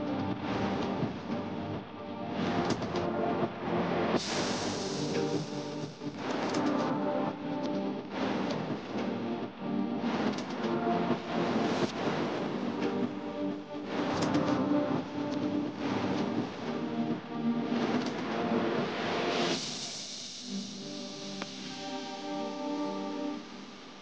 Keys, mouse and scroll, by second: 1.0-1.7 typing, 1.8 Return, 4.0 ctrl+click, 11.2-14.4 typing, 20.2 typing, 22.4 Return.